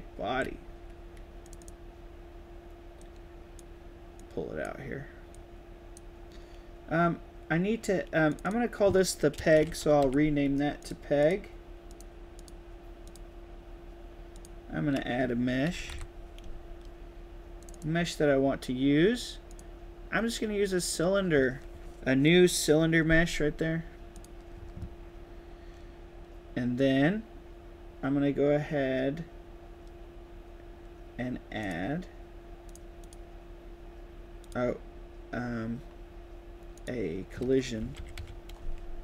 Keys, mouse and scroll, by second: 0.2 a, 1.3 click, 1.5 click, 2.9-3.5 drag, 4.1 click, 8.2 click, 8.3 click, 9.6 e, 9.9 g, 10.7 drag, 11.1 click, 11.8 drag, 12.3 click, 13.0 drag, 14.2 click, 15.4-16.2 typing, 17.5 click, 24.0 click, 31.5 click, 32.6 click, 34.3 click, 36.6 click.